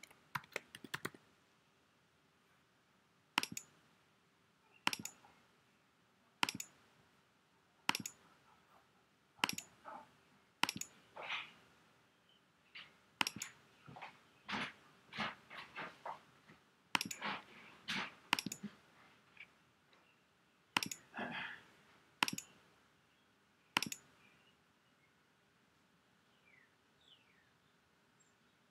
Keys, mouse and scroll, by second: 0.0-1.6 typing, 3.5 click, 13.3 click, 17.0 click, 17.1 click.